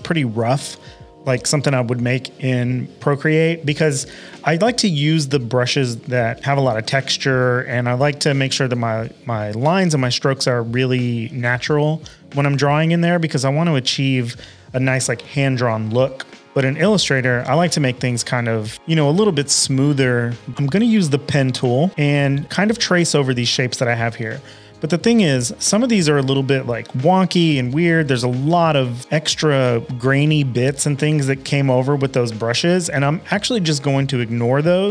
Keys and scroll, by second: 20.2-21.9 typing, 25.8 super+=, 26.0 super+=, 27.0 space.